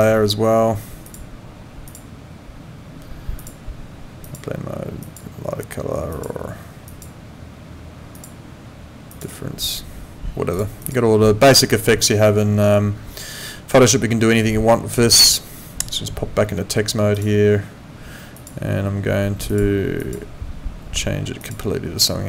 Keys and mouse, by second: 1.1 click, 3.4 click, 6.1 click, 8.2 click, 10.5 click, 17.1 click, 18.3 click, 19.5 click, 21.4 click.